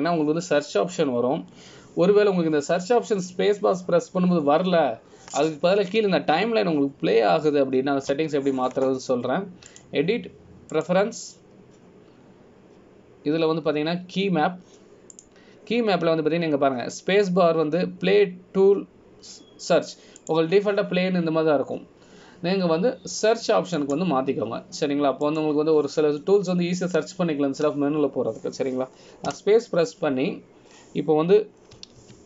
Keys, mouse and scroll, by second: 0.8 space, 11.9 click, 31.5 space.